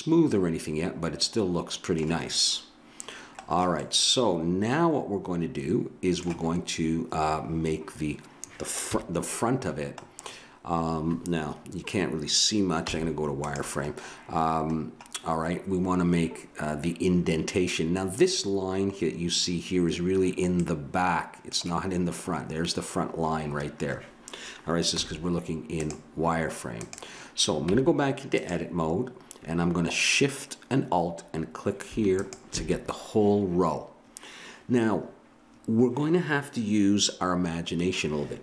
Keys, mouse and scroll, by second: 3.5-5.2 middle drag, 8.8 KP_1, 12.8 z, 14.8-18.1 middle drag, 25.0 z, 26.7-28.5 drag, 27.7 Tab, 32.2-34.1 drag.